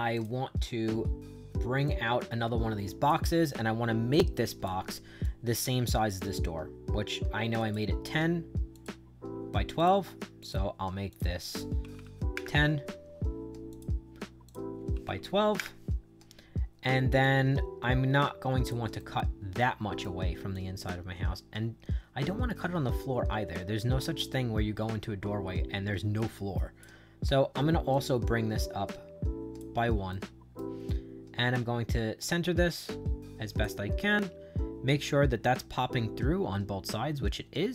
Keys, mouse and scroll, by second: 0.0 click, 1.8-3.0 drag, 4.0 click, 5.1 click, 7.5 click, 8.6 click, 9.7 click, 10.3 click, 11.0 click, 11.5-12.4 typing, 13.6 click, 14.4 click, 14.6-15.5 typing, 17.1-18.6 drag, 18.9-19.9 right drag, 20.4-26.7 drag, 27.8-29.5 drag, 30.0 right click, 30.8-33.5 drag, 33.9-37.7 right drag.